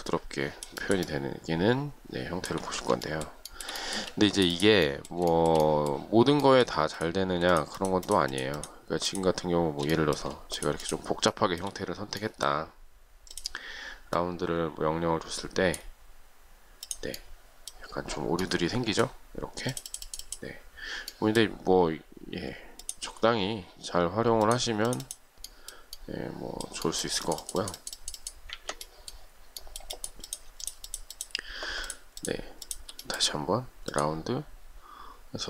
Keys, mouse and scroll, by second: 3.3 shift+middle click, 3.7 shift+middle click, 3.8 shift+double middle click, 4.3 space, 5.5 shift+middle click, 7.7 shift+click, 8.0 shift+click, 8.2 shift+click, 8.3 shift+double click, 8.5 shift+click, 8.8 shift+click, 10.8 shift+click, 11.0 shift+click, 11.1 shift+double click, 11.5 shift+middle click, 28.7 ctrl+z, 30.8 shift+click, 31.0 shift+click, 31.2 shift+double click, 31.3 shift+click, 32.0 shift+click, 32.4 shift+click.